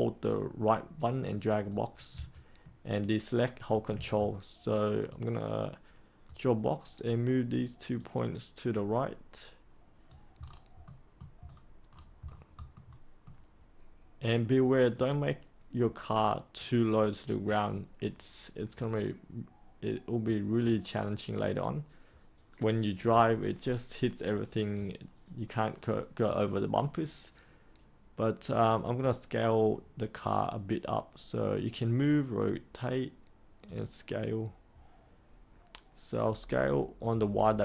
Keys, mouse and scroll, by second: 2.2 ctrl+right click, 4.1-5.0 scroll up 1, 5.0-6.8 right drag, 7.9-10.4 drag, 10.4-10.8 scroll down 1, 10.8 middle click, 11.4-11.8 scroll up 1, 11.8-12.7 scroll down 1, 12.7-13.9 middle drag, 14.9 right click, 16.5-17.9 drag, 18.7-20.6 right drag, 20.6 click, 21.3-27.0 right drag, 31.9-37.6 drag.